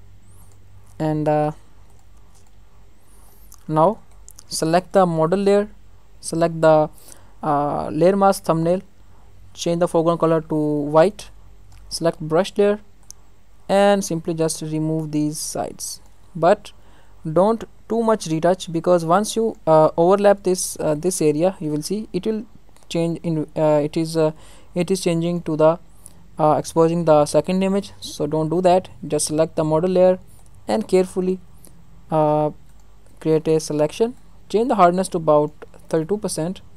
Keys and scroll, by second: 17.2 ctrl+alt+z, 27.7 ctrl+alt+z.